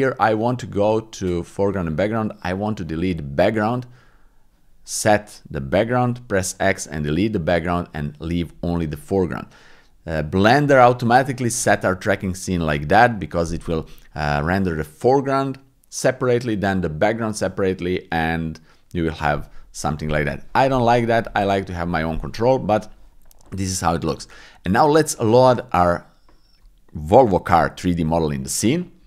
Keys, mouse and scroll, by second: 4.9 click.